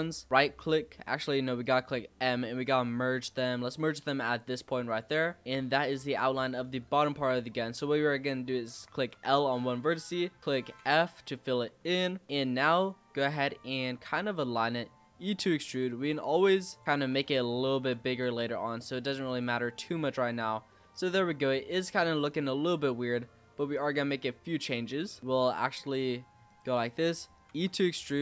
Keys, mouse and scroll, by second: 0.3-1.5 right drag, 1.5 m, 4.8 click, 5.1 scroll down 4, 5.4 scroll up 3, 5.7-6.2 scroll down 3, 6.2-6.6 scroll up 2, 6.6 shift+middle click, 7.4 click, 9.1 l, 10.8 f, 11.3-11.8 scroll down 3, 11.8 z, 12.2-13.5 middle drag, 13.5 click, 14.0-14.5 scroll up 3, 14.5 e, 17.1 l, 17.8 s, 19.6 middle click, 20.6 scroll down 3, 20.8-22.2 middle drag, 22.2 click, 22.6 z, 24.5-24.8 scroll up 3, 24.8 shift+middle click, 25.2 z, 25.4 click, 25.8 middle click, 26.4 click, 26.8-27.4 scroll up 2, 27.4 e.